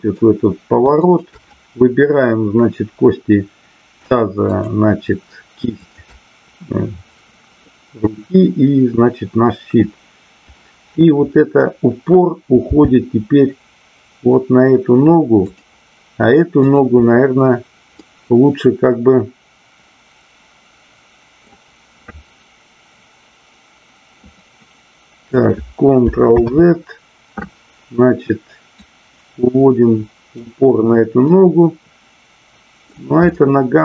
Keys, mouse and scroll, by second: 0.9 shift+click, 5.8-6.9 shift+drag, 15.5 drag, 16.5-17.3 drag, 17.9-21.4 middle drag, 24.4-25.2 middle drag, 28.9-30.4 drag, 31.3 scroll up 1, 31.4-32.8 middle drag, 33.3-33.8 middle drag.